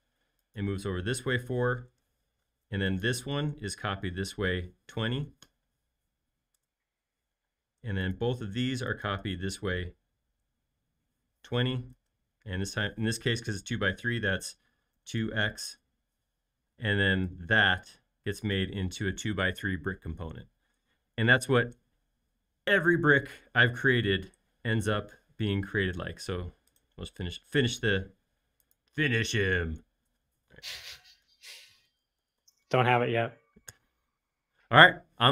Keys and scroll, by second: 1.7 4, 1.9 Return, 5.0-5.7 typing, 6.5 Return, 7.4 space, 8.6 m, 11.3-12.2 typing, 14.8-16.7 typing, 31.2-33.4 typing, 33.7 Return.